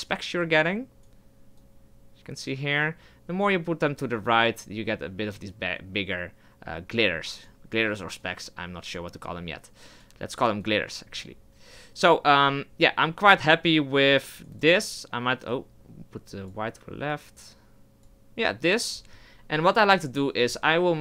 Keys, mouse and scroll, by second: 10.8-21.0 drag.